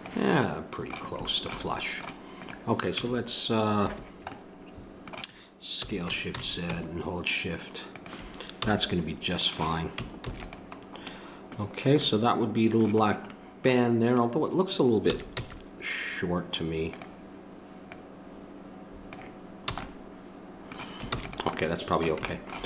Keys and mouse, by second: 2.4-4.0 drag, 2.9 Tab, 5.8 s, 8.6 a, 10.2 ctrl+s, 14.0-16.9 drag, 15.1 s, 19.7 a, 21.1 ctrl+s.